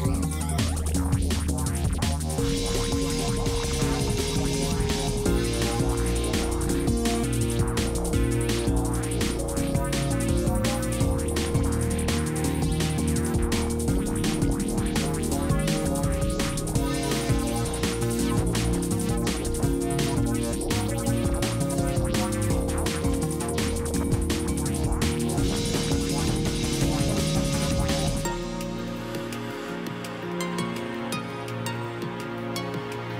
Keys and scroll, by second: 1.7-3.0 typing, 10.2 ctrl+alt+s, 12.7 ctrl+alt+s, 15.1 ctrl+alt+s, 17.9 ctrl+alt+a, 20.1 ctrl+alt+s, 22.7 ctrl+alt+s, 24.4 ctrl+alt+s, 26.2 ctrl+alt+s, 27.9 ctrl+alt+s.